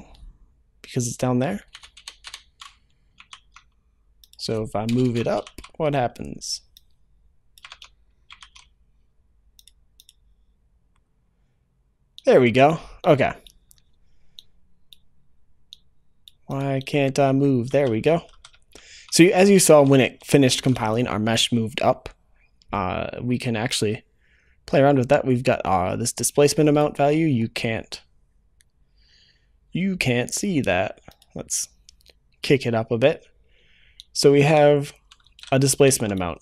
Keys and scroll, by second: 3.2 ctrl+s, 5.2 ctrl+v, 5.3 ctrl+s.